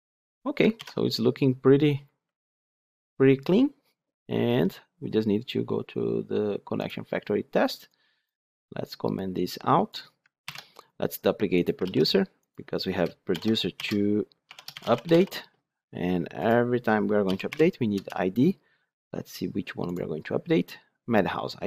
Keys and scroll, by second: 0.7 ctrl+alt+l, 10.5 ctrl+/, 11.7 ctrl+d, 17.9 Return.